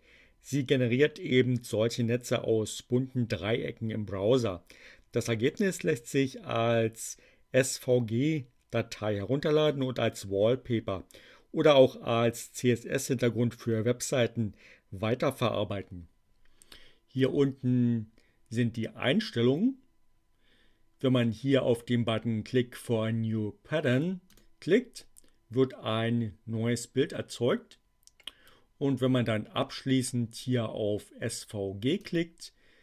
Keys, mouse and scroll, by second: 17.1 click, 24.2 click, 31.7 click.